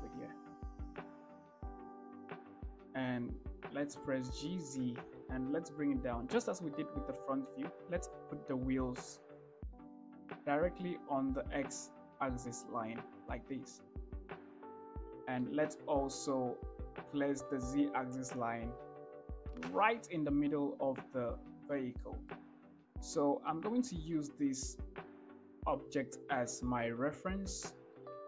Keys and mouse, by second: 1.0-1.3 drag, 2.8 shift+click, 4.5 g, 5.0 z, 14.7 shift+middle click, 15.7 shift+middle drag, 22.3 shift+middle drag, 23.3 shift+middle drag, 24.1 shift+middle drag, 27.9-28.2 shift+middle drag.